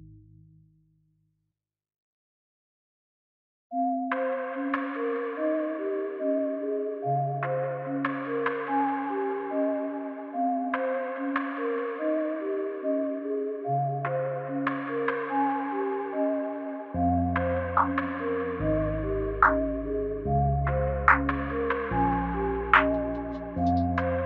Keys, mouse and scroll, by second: 0.4 click, 4.2 click, 4.5 click, 6.9 g, 8.9 space.